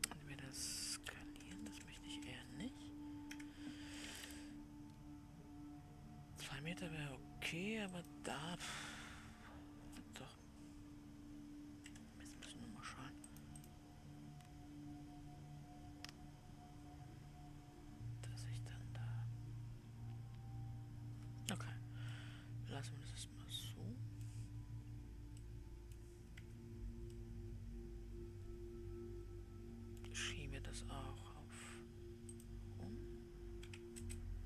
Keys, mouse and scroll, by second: 2.0 BackSpace, 2.1 BackSpace, 2.6 BackSpace, 14.2-27.8 drag, 27.8-30.5 middle drag, 30.5-32.7 scroll up 1, 32.7-34.4 drag.